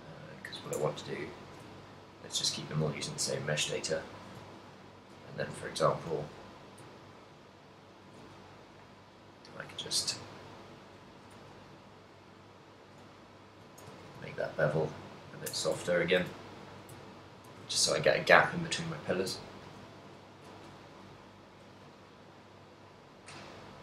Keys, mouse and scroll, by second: 0.8 shift+click, 1.3 Tab, 1.6 shift+middle click, 1.9 ctrl+middle click, 2.7 ctrl+middle click, 3.2 a, 3.6 alt+right click, 4.0 alt+shift+right click, 4.6 shift+middle click, 5.6 shift+middle click, 7.2 g, 10.0 click, 10.4 shift+middle click, 11.3 shift+middle click, 12.5 alt+right click, 13.2 alt+shift+right click, 14.1 g, 15.5 click, 15.6 Tab, 16.0 ctrl+middle click, 16.5 shift+middle click, 17.1 ctrl+middle click, 17.7 a, 17.9 shift+middle click, 19.4 ctrl+middle click, 20.0 shift+middle click, 20.8 right click, 21.5 alt+d.